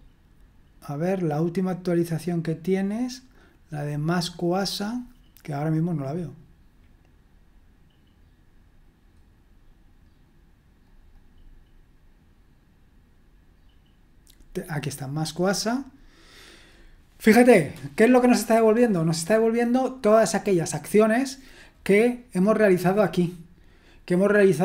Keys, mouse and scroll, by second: 10.8-12.8 drag, 15.3-24.6 drag.